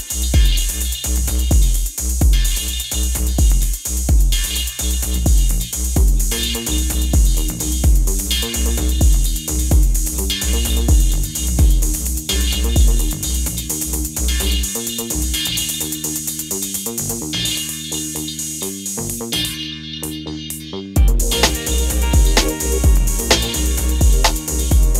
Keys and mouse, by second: 0.4 middle click, 1.7-3.4 middle drag, 3.5 middle drag, 5.8 middle click, 5.9 middle click, 6.5 middle click, 6.7-7.8 drag, 8.6 middle click, 9.2 click, 9.8-11.3 middle drag, 11.7 middle click, 15.0 middle click, 15.7 middle click, 15.9 middle click, 16.0 click, 16.8 click, 19.9-22.5 middle drag, 23.7 middle click, 24.4 middle click.